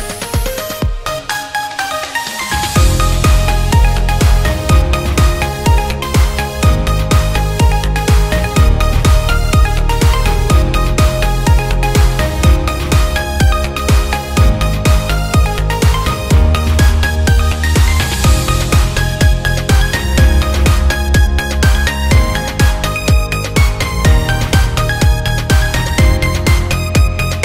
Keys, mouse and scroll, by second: 0.2 ctrl+click, 1.4 click, 2.7 click, 5.1 click, 6.0-7.9 drag, 9.1 click, 10.9 shift+a, 13.1 KP_0, 14.3 ctrl+click, 14.7 click, 15.5 click, 16.8 alt+click, 17.3 ctrl+click, 18.3 ctrl+click, 19.4 r, 20.5 click, 22.0 alt+click, 22.6 KP_0, 24.9 click, 26.9 click.